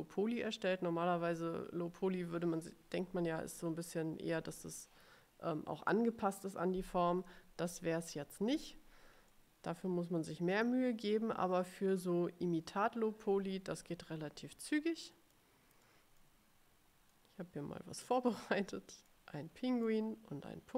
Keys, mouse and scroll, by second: 9.4 middle click, 10.1 click, 13.3-14.5 ctrl+scroll down 6, 14.9 click, 15.2 middle click, 16.0 middle click, 17.2-18.8 drag, 18.9 middle click, 19.7 middle click.